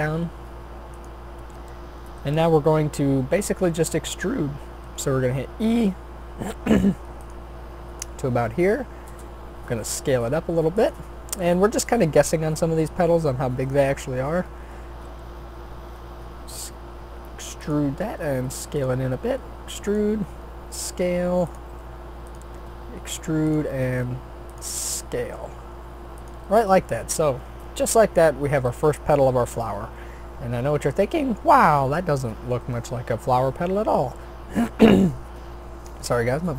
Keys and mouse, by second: 2.7-3.9 middle drag, 4.6 e, 8.9 s, 14.9 e, 18.0 s, 18.9 e, 20.1 s, 21.7 g, 22.6 e, 23.8 s, 24.9 g, 27.1-33.5 drag, 33.5 middle click, 34.4 click, 34.6-36.5 middle drag.